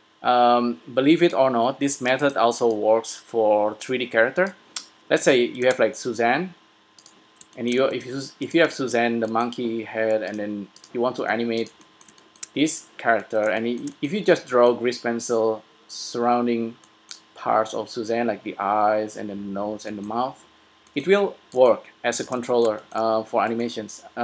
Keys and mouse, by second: 2.7 s, 5.1 middle click, 5.9 shift+a, 8.2 g, 8.6-11.1 drag, 11.4 g, 11.9 click, 22.1 x.